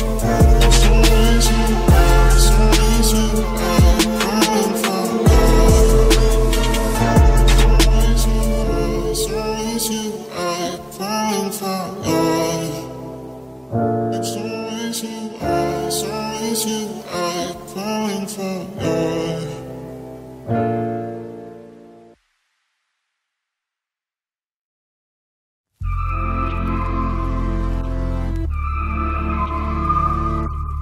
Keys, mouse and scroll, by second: 1.8 KP_Decimal, 3.7 i, 5.2 z, 5.9-7.1 drag, 7.0 KP_3, 8.2 ctrl+b, 9.7 Tab, 10.5 z, 10.8 Tab, 13.7-16.1 drag, 17.3-18.3 drag, 18.1 c, 18.3-19.5 right drag, 25.7-28.0 drag, 26.6 c.